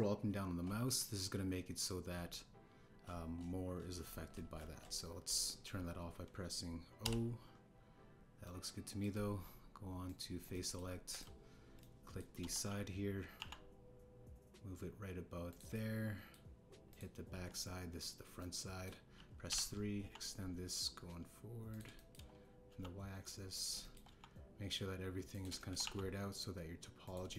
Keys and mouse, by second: 8.0 o, 9.4 click, 11.0 click, 11.5 click, 12.1 click, 12.8 click, 13.4 KP_1, 14.3 e, 16.4 click, 17.8 click, 18.3 KP_1, 19.3 click, 20.4 KP_3, 21.0 e, 22.7 click, 22.9 shift+click, 23.6 e, 24.8 shift+click, 25.1 e, 26.5 shift+click, 26.8 e.